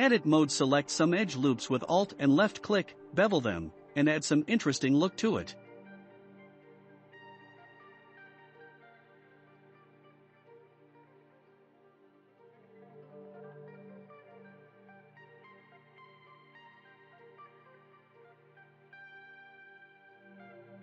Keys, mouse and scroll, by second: 0.6 ctrl+b, 4.7 s, 7.1-8.3 shift+middle drag, 8.3 click, 8.5 click, 9.6 ctrl+b, 13.5 2, 14.0 click, 14.1 click, 17.4-20.3 middle drag, 20.3-20.8 scroll up 3.